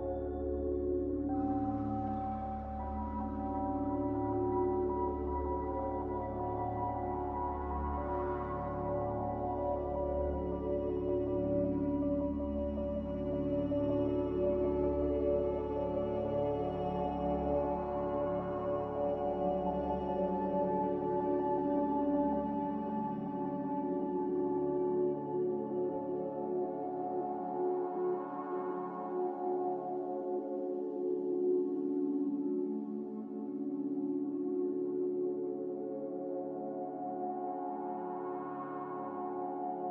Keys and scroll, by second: 3.7 space, 21.3 a, 22.4 z, 25.7 typing, 25.9 Return, 35.1 typing.